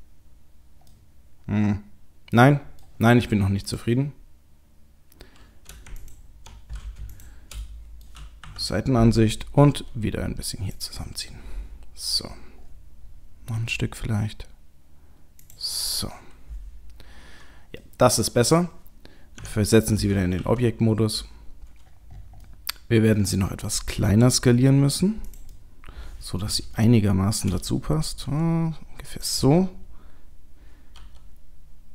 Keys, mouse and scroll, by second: 0.9 middle click, 3.7 click, 5.9 alt+click, 7.1 shift+click, 7.6 middle click, 8.0 middle click, 8.4 KP_3, 9.2-9.9 scroll up 3, 9.7 g, 11.1-12.3 scroll down 6, 12.3 scroll down 2, 12.6-13.0 scroll up 3, 13.5-14.4 scroll up 2, 13.5 g, 15.8 click, 17.8 middle click, 17.8 scroll down 3, 19.3 Tab, 20.4 KP_3, 21.4-21.9 scroll up 2, 21.9-23.4 scroll down 6, 22.4 middle click, 23.4-24.0 scroll up 1, 24.0-25.3 scroll up 2, 24.0 s, 25.5 middle click, 26.8 shift+middle click, 28.3 s, 31.0 g.